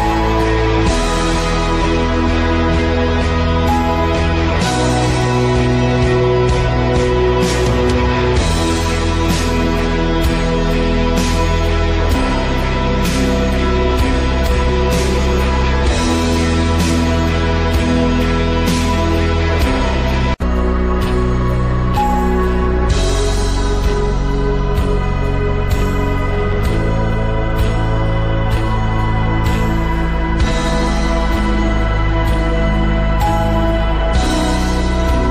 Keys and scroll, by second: 1.5 shift+a.